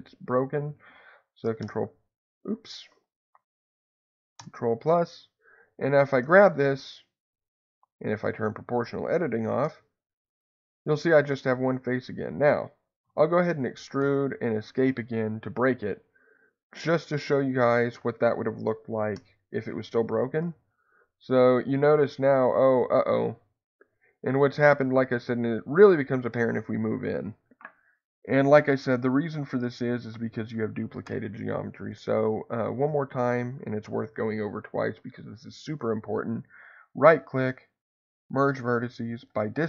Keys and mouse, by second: 1.6 shift+KP_Add, 4.3 shift+KP_Add, 6.2 g, 7.5 Escape, 8.6 click, 9.6 g, 12.0 Escape, 13.0 e, 13.9 Escape, 19.1 ctrl+KP_Add, 20.4 g, 31.1 Escape, 32.8 a.